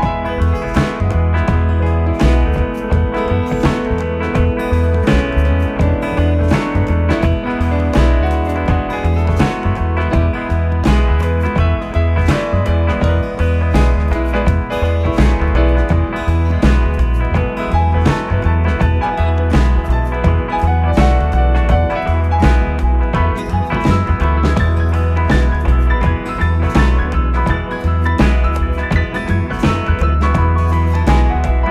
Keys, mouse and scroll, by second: 0.1 e, 2.9 s, 7.0 e, 11.1 e, 16.4 r, 19.5 g, 25.9 s, 29.4-31.7 drag.